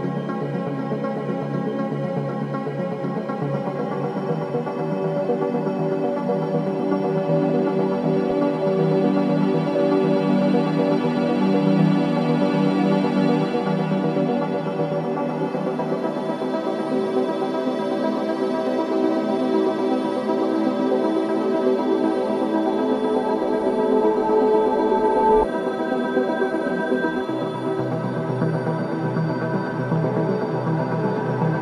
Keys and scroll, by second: 0.4 ctrl+z, 1.6 BackSpace, 3.0 ctrl+KP_0, 13.1 ctrl+shift+3, 14.7 ctrl+shift+3, 18.1 3, 22.4 ctrl+shift+3, 23.4 KP_3, 26.0 ctrl+g.